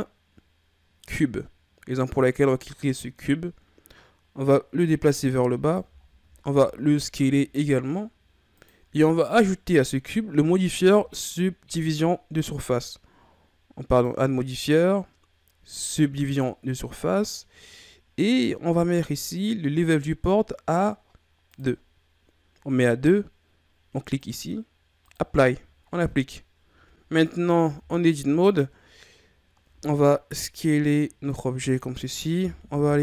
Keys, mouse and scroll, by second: 4.5-6.0 drag, 6.0-6.4 shift+scroll down 6, 6.5 s, 13.9-16.9 drag, 17.8-21.2 scroll up 4, 21.5-27.1 drag, 27.4 scroll up 1, 27.6 Tab, 28.4-29.7 scroll down 2, 29.7 s, 32.7 KP_3.